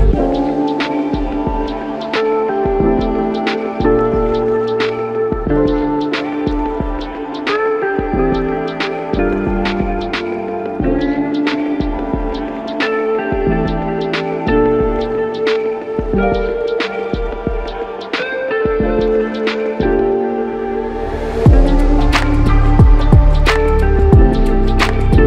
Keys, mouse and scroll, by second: 2.7 ctrl+scroll up 1, 12.6-13.2 ctrl+scroll down 1, 16.6 f, 21.3 alt+click, 24.2 alt+click.